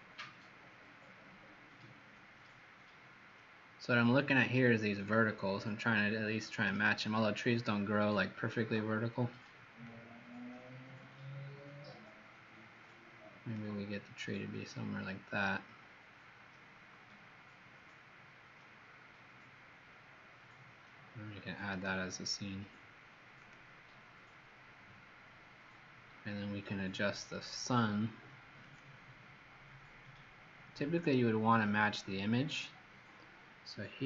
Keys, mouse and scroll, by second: 9.8 click, 14.5 middle click, 21.6 right click, 23.3 click.